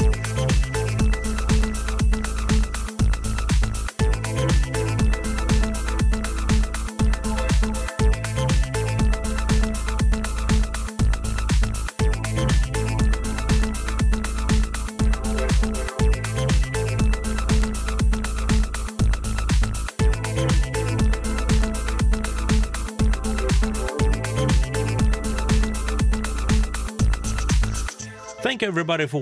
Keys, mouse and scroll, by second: 0.3-3.2 middle drag.